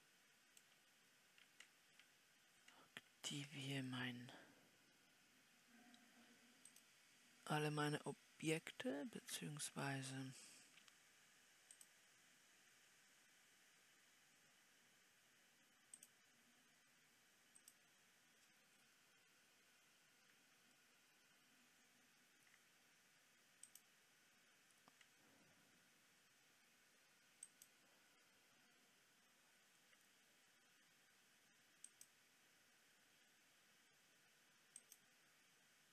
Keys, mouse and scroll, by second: 8.8 shift+click.